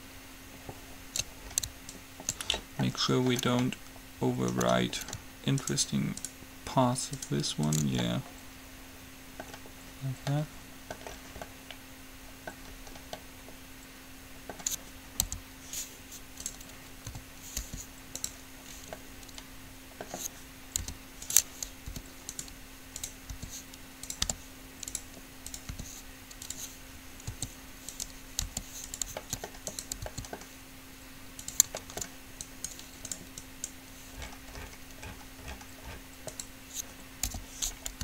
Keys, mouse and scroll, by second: 0.7 click, 2.1-4.0 drag, 5.8-8.5 middle drag, 9.0 middle click, 9.8 middle click, 10.7-15.3 middle drag, 15.3 u, 17.3 a, 17.8 r, 21.1 u, 22.1 r, 23.2-24.8 drag, 23.5 r, 24.4 g, 25.8-26.8 drag, 25.9 r, 27.5 s, 28.6 g, 29.3 s, 30.3 s, 31.9 middle click, 32.7-35.5 right drag, 37.5 o, 37.8-38.0 middle drag.